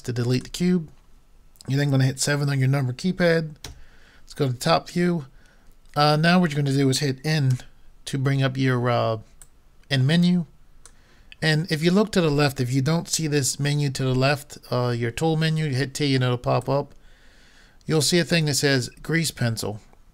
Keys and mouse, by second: 3.7 KP_7, 7.5 n, 9.4-11.3 drag, 16.6-18.4 drag.